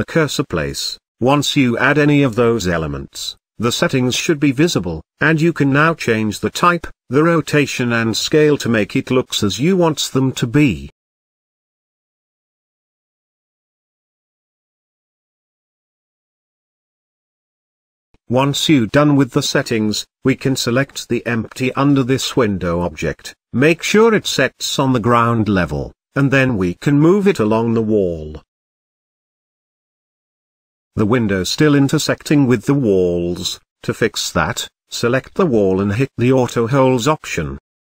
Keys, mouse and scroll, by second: 1.7-3.3 drag, 3.3-5.2 scroll down 4, 6.5-8.3 drag, 9.6-11.6 drag, 13.8 click, 14.8-16.6 middle drag, 17.5-18.0 scroll down 2, 18.0-21.3 drag, 21.3-22.0 middle drag, 22.0 click, 22.4 click, 23.3 click, 25.7 g, 27.6-28.4 middle drag, 28.4-29.1 scroll up 3, 29.1 g, 31.8 g, 33.1-33.6 shift+middle drag, 33.6 click, 34.7 click, 35.9 click, 36.8-37.8 middle drag.